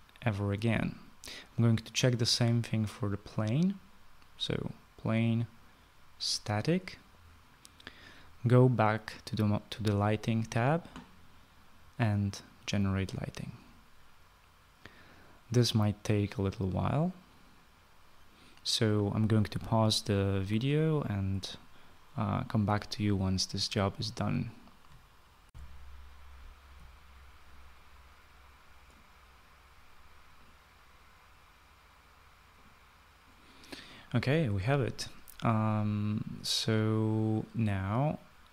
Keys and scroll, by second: 25.5 shift+F9, 25.8 shift+F9.